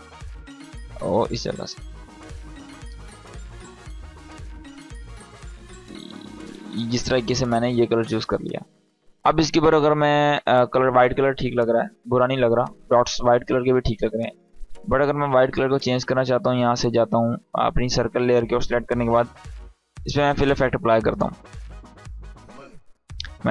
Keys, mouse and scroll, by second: 0.8-1.5 click, 3.1-6.5 drag, 11.1 click, 14.2 click, 18.9 f, 21.5-23.5 drag.